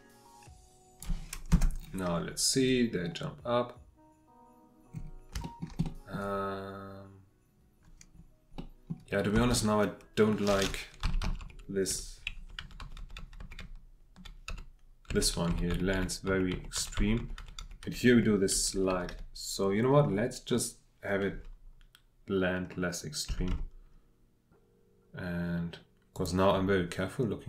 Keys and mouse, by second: 1.5 space, 5.4 shift+middle click, 5.8 click, 8.5 click, 9.3 space, 11.0 Right, 11.2 Right, 11.4 Right, 11.9 Left, 12.3 Right, 12.4 Right, 12.6 Right, 12.8 Right, 13.0 Right, 13.2 Right, 13.4 Right, 13.6 Right, 14.1-18.5 Right, 18.5 Left, 18.7 Left, 23.3 r, 23.5 x.